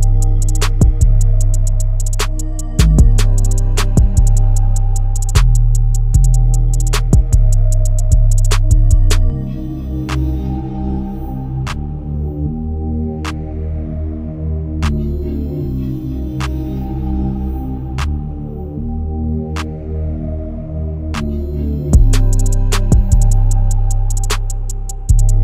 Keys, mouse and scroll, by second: 9.6-11.3 drag, 11.3 ctrl+q, 15.4 ctrl+q, 16.6-23.1 drag, 24.3 right click.